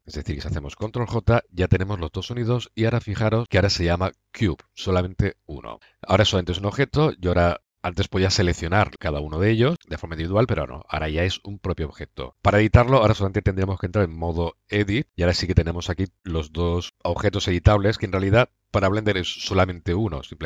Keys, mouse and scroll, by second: 0.0 ctrl+z, 0.7 ctrl+j, 4.2-4.6 drag, 6.0 click, 6.4 a, 7.5 drag, 7.7-8.8 middle drag, 12.5-14.2 middle drag, 14.6 Tab, 15.3 a, 16.1 click, 17.0 click, 17.2-19.0 drag.